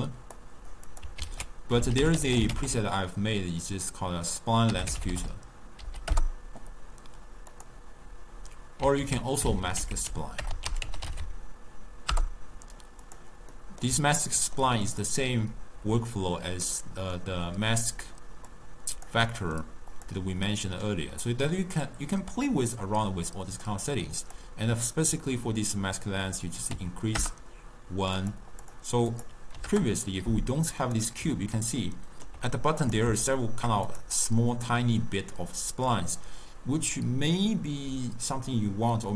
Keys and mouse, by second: 0.5 click, 1.0 click, 1.3 ctrl+a, 9.1 ctrl+a, 13.7-15.0 middle drag, 15.0 click, 16.9-18.7 middle drag, 18.7 click, 19.4-20.1 middle drag, 20.1 click, 20.7-23.5 middle drag, 23.5 click, 24.4-27.5 drag, 28.3 click, 29.2-31.1 drag, 31.7-33.0 ctrl+middle drag, 33.0 click, 33.4-34.0 shift+middle drag, 34.0 click.